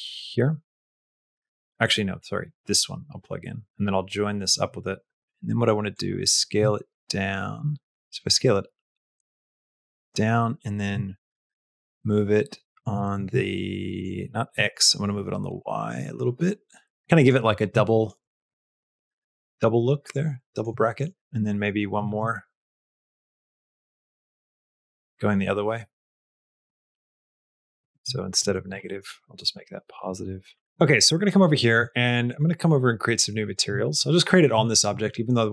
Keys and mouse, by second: 0.5 click, 2.3-3.6 drag, 3.9 click, 5.9-9.9 drag, 10.7-12.7 shift+drag, 13.0 ctrl+z, 13.8-15.0 drag, 15.5-17.2 shift+drag, 17.7 shift+middle click, 18.4 shift+middle click, 19.5 middle click, 20.7 shift+middle click, 21.4 click, 22.0 shift+d, 23.6 click, 25.2-26.4 drag, 27.3-30.4 drag, 28.4 ctrl+Left, 31.0 click, 32.2 click, 33.3 click, 34.5 shift+middle click.